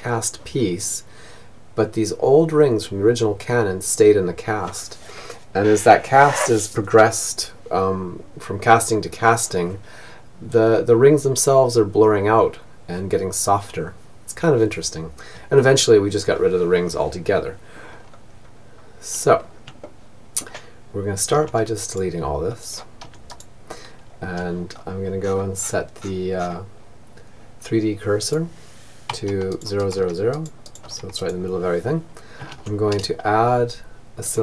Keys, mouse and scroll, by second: 16.8-20.1 middle drag, 19.7 x, 21.1 click, 21.4 x, 21.8-22.9 right drag, 23.6-26.6 middle drag, 26.6-30.8 drag, 30.8 shift+a, 34.3 t.